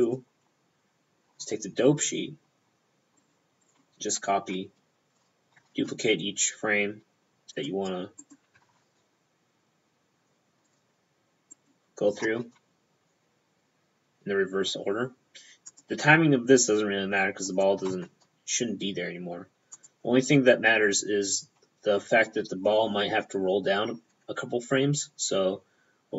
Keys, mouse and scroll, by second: 0.1 click, 1.5 click, 1.5 p, 3.3 right click, 3.7 right click, 5.4 shift+p, 5.6 shift+d, 7.6 click, 8.3 right click, 8.6 shift+p, 8.7 shift+d, 10.7 click, 11.6 right click, 11.7 p, 12.2 shift+p, 12.3 shift+d, 15.7 click, 17.5 right click, 17.9 shift+p, 18.0 shift+d, 18.8 p, 19.8 click.